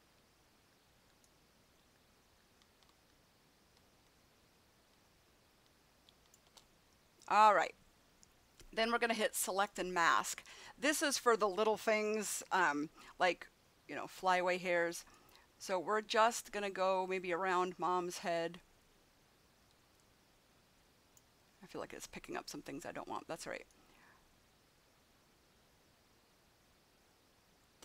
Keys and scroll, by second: 12.3 [.